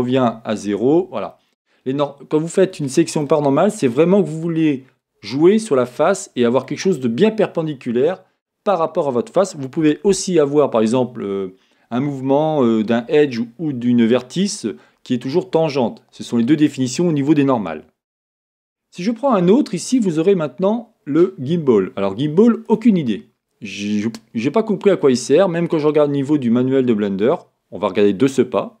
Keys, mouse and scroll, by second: 0.6 z, 19.4 click, 20.9-23.8 drag, 23.8-28.8 middle drag.